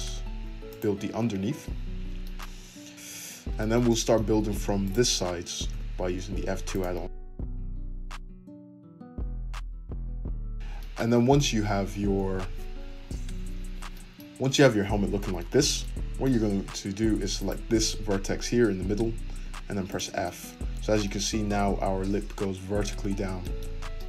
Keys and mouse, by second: 1.2 `, 3.0 `, 4.8 click, 4.9-7.1 middle drag, 5.7 f, 7.1 click, 7.6-9.0 middle drag, 7.6 f, 8.9 `, 9.0-10.6 shift+drag, 10.3 g, 10.6 Tab, 10.7-17.4 shift+middle drag, 17.4 click, 17.4-24.0 middle drag, 19.3 f.